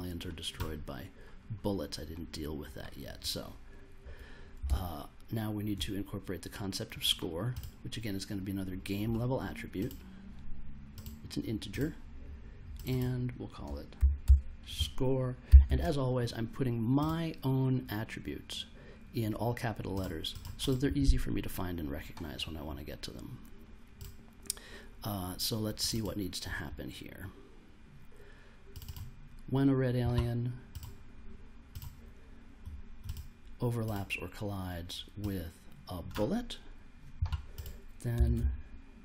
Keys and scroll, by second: 4.6 super+Tab, 13.9 shift+s, 14.2 shift+c, 15.2-16.1 typing, 37.8-38.8 typing.